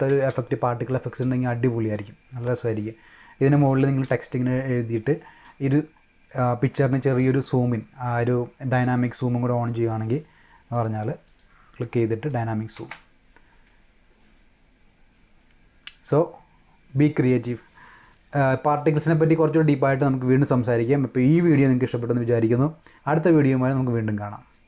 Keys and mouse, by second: 10.7 click, 11.2 click, 12.2 click, 12.7 space.